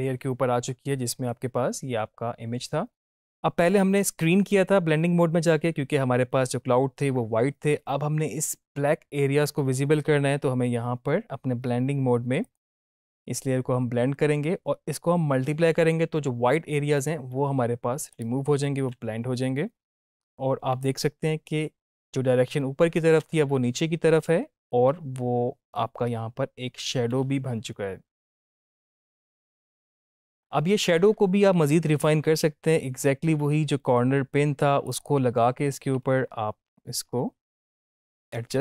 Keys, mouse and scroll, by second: 12.3 click, 18.0-21.1 drag, 23.1 space, 31.9 space, 34.8 click, 36.1 space, 37.7 click, 38.2 ctrl+-.